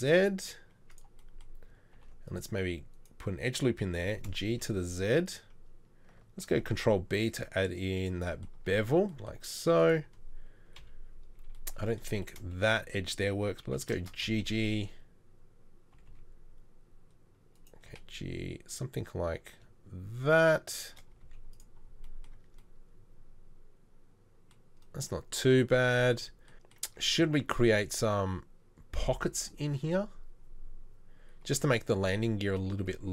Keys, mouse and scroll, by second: 1.9 ctrl+r, 4.0 g, 6.5 ctrl+b, 8.6 Tab, 8.9 Tab, 10.8 KP_3, 13.7 g, 17.9 g, 21.2 z, 22.4 Tab, 26.9 Tab.